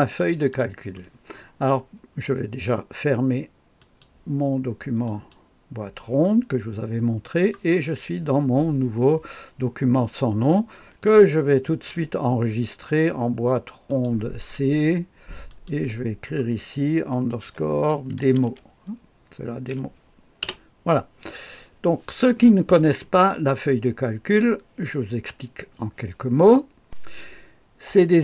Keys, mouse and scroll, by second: 0.2 click, 0.4 click, 3.8 click, 5.0 click, 11.7 ctrl+s, 13.9 click, 15.5 click, 17.4-19.7 typing, 20.4 Return.